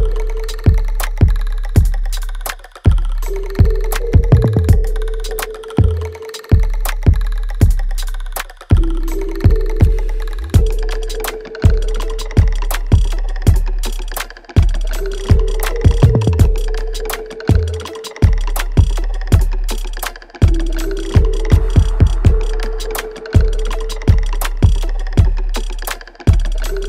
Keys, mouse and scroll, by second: 0.1 click, 1.1 space, 1.8 alt+click, 2.4 alt+right click, 4.5-6.2 alt+drag, 6.2-7.7 alt+drag, 13.0 click, 13.8-15.4 right drag, 15.4-17.5 alt+drag, 18.8 alt+click, 21.2 alt+click, 21.7 alt+middle click, 22.2-23.6 alt+right drag, 23.6 shift+click, 25.8 alt+right click, 26.1 alt+click, 26.7 alt+middle click.